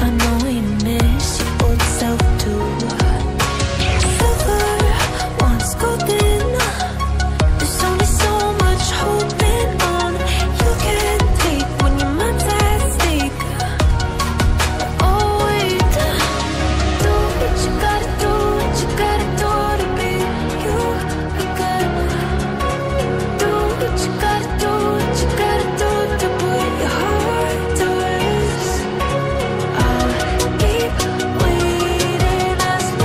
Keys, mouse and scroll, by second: 0.0-1.3 typing, 0.2 Return, 2.7 click, 12.8 double click, 13.6-14.7 scroll up 1, 14.7 click, 15.7-16.6 scroll down 1, 17.4 click, 28.4 click, 29.0 double click, 29.4 click, 31.9 right click.